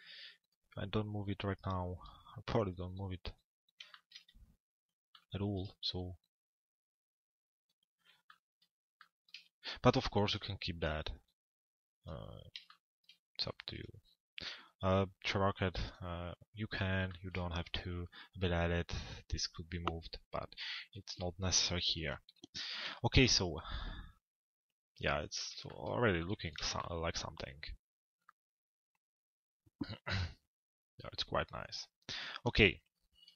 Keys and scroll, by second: 21.5 p.